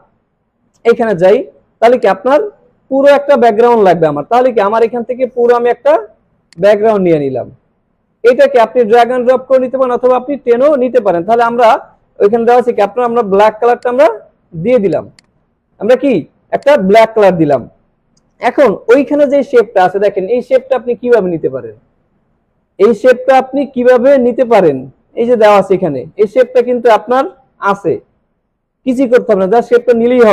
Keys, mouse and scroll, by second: 0.4 click, 1.6 alt+scroll down 1, 1.9 space, 2.0-2.9 click, 2.4 space, 4.8-8.4 drag, 16.2 alt+scroll up 1, 16.5 space, 16.6-17.2 click, 17.1 alt+scroll down 1, 17.5-18.4 click, 17.9 space, 19.5 click, 28.5 click.